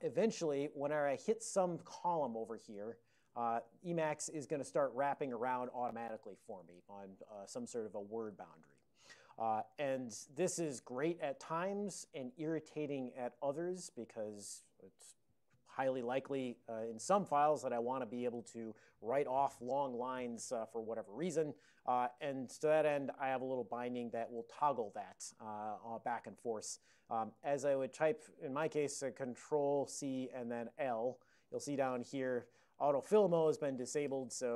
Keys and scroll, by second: 0.0-9.2 typing, 23.2 ctrl+n, 23.4 ctrl+n, 23.5 ctrl+n, 23.7 ctrl+n, 27.1 ctrl+p, 27.3 ctrl+p, 27.5 ctrl+p, 27.6 ctrl+p, 29.6 ctrl+c, 34.4-34.5 typing.